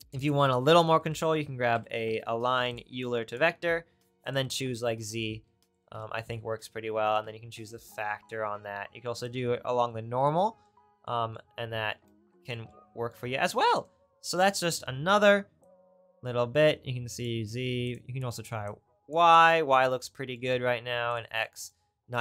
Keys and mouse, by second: 3.3 middle click, 4.3-7.2 middle drag, 17.9 right click, 21.1-22.2 right drag.